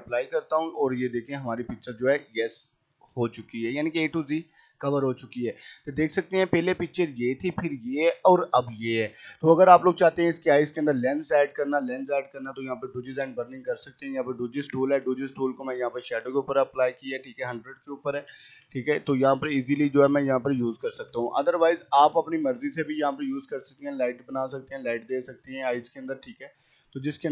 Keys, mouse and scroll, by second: 1.9 scroll up 1, 2.9 right click, 3.1 click, 9.0 click, 12.9 click, 13.1 right click, 13.8 click, 16.7 click, 17.7-18.6 typing, 19.1-21.8 drag, 21.4 z, 23.9 click, 25.4-27.2 drag, 27.2 space.